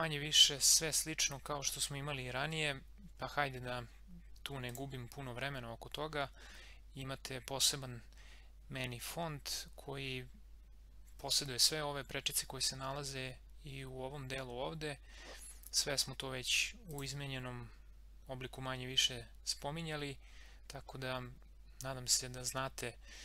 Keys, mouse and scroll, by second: 4.6 click, 16.8 click.